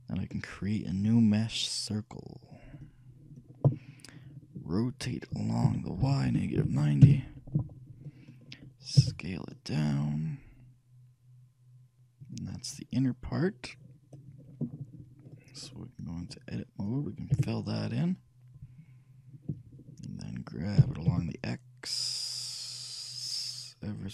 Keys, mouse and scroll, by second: 5.8 r, 9.2 s, 13.1-15.4 middle drag, 16.4-18.1 drag, 17.5 f, 21.1 g.